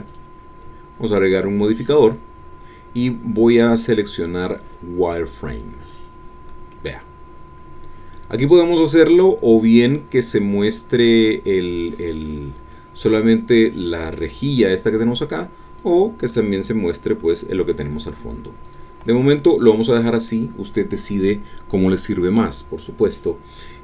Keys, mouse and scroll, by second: 0.0 click, 5.5 click, 6.7-8.6 middle drag, 8.7-12.1 scroll up 1, 12.1-14.3 middle drag, 15.8 click, 16.3-17.9 middle drag, 18.6 click, 19.4-23.8 middle drag.